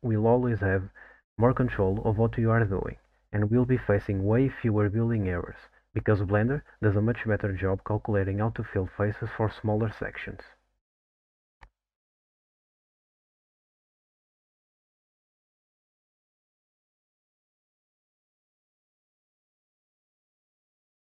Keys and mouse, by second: 0.4 f, 1.5 ctrl+t, 1.9-2.6 middle drag, 4.0 ctrl+click, 4.9 f, 5.7 ctrl+t, 6.8 middle click, 7.8 middle drag, 8.7 click, 9.6 ctrl+click, 10.4 f, 11.3 ctrl+t, 13.0 click, 13.1 click, 14.7 ctrl+click, 15.6 f, 16.4 ctrl+t, 17.1 alt+click, 17.6 middle click, 18.1 f, 18.8 ctrl+t, 19.9 middle click.